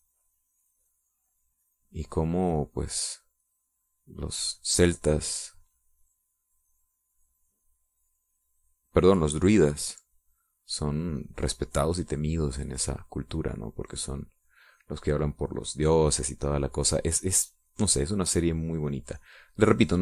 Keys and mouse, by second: 0.9-10.4 drag, 11.7-13.7 drag, 13.8-18.0 drag, 18.1-20.0 drag.